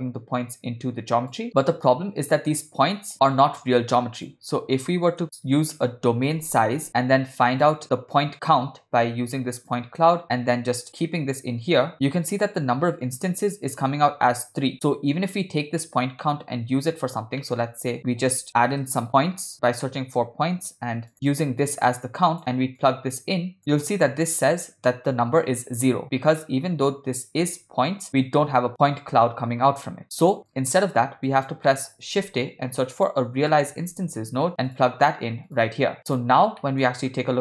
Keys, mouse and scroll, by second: 4.3-4.6 drag, 5.2 shift+a, 8.2-9.8 drag, 10.2 click, 10.9-11.9 drag, 16.2 middle click, 16.9 click, 17.4 middle click, 18.1 shift+a, 19.1 BackSpace, 19.4 BackSpace, 21.9-22.4 drag, 22.8-23.6 drag, 23.6 middle click, 30.0 click, 30.6 click, 31.3 click, 31.7 middle click, 32.2 shift+a, 36.0 click, 36.6 middle click.